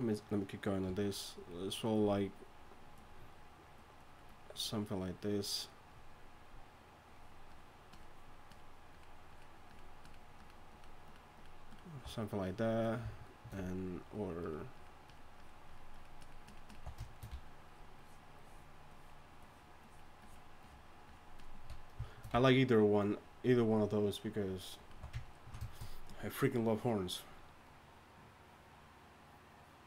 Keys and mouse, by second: 0.8-12.0 typing, 13.6-25.0 typing.